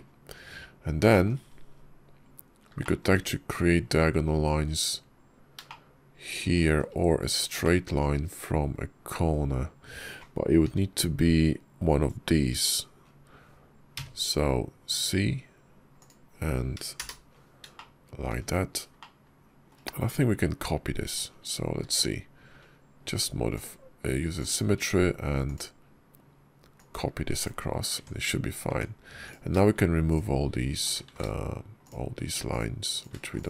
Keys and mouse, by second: 0.4 KP_5, 0.9 shift+click, 2.7 shift+click, 5.5-6.6 shift+drag, 7.5 shift+click, 10.5 k, 17.6 shift+click, 18.8 shift+click, 20.9 Tab, 21.7 alt+x, 24.7 click, 27.8 Tab, 28.5 Tab, 29.1 click, 29.9 shift+click, 30.9 ctrl+z, 31.6 shift+click, 32.8 shift+click, 33.1 x.